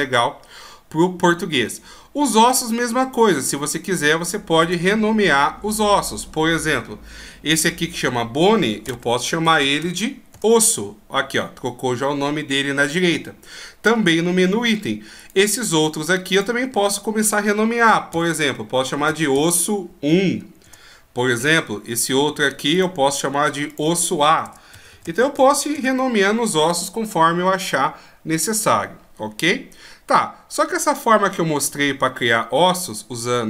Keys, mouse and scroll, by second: 4.6 right click, 7.6 click, 9.5 s, 15.1 right click, 16.3 click, 19.0 s, 22.6 right click, 23.6 click, 24.8 s.